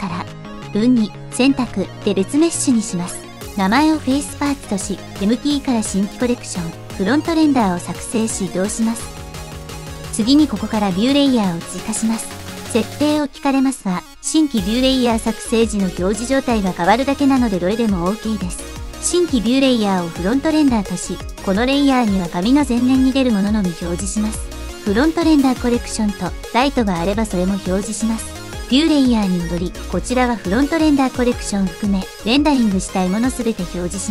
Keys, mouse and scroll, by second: 0.0 click, 0.0 middle click, 0.6-2.5 drag, 3.1 Tab, 3.6 click, 5.3-6.6 shift+drag, 7.3 m, 11.0-18.9 drag, 20.2-21.5 shift+drag, 24.2 click, 24.5 click, 25.5 click, 27.3-28.5 middle drag, 28.9 click, 29.8 middle click, 32.2 click, 33.2 click.